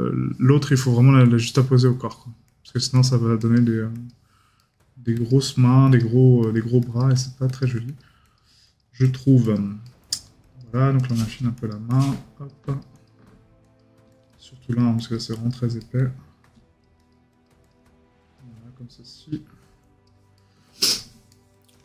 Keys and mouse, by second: 4.6 right click, 9.8 right click, 15.8 right click, 20.3 right click.